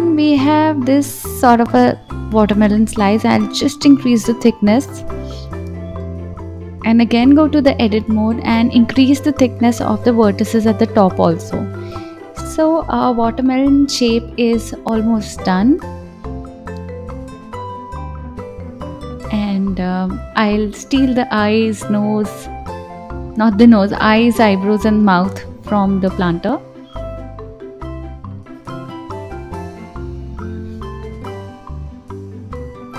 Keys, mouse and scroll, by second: 0.0-1.6 drag, 1.8-3.6 middle drag, 3.6 click, 3.9-4.7 middle drag, 4.7 click, 6.8 click, 8.4-9.5 drag, 9.8 click, 10.2 s, 11.5-13.3 middle drag, 13.3 KP_1, 14.4-17.5 drag, 19.0-20.2 scroll down 2, 20.7 click, 21.4 scroll up 3, 22.1 click, 23.7 click, 29.2 shift+d, 30.6 alt+z, 30.8-32.2 typing, 31.1 scroll up 3, 32.4-32.9 drag.